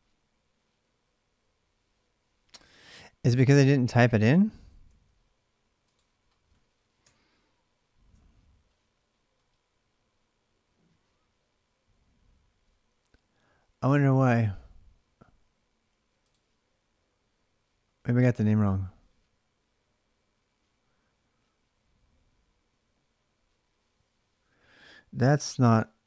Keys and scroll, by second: 4.6 ctrl+c, 6.8-7.8 BackSpace.